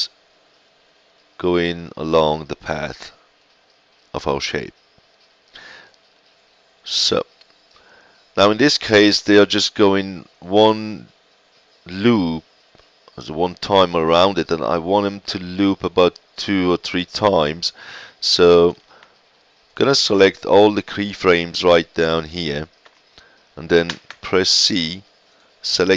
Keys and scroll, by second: 23.8 ctrl+c.